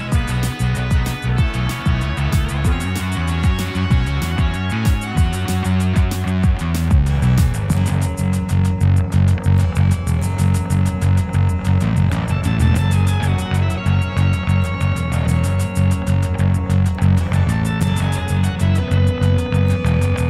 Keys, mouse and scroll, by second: 7.2 k, 10.4 middle click, 11.1 click, 11.3 g, 12.6 middle click, 13.5 click, 14.4 g, 15.5 click, 15.6 g, 17.3 shift+click, 18.7 click.